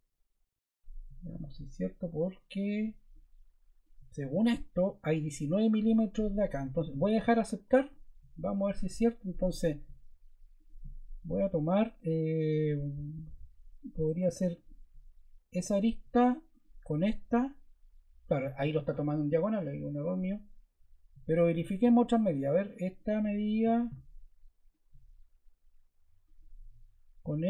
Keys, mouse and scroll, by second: 26.2 click.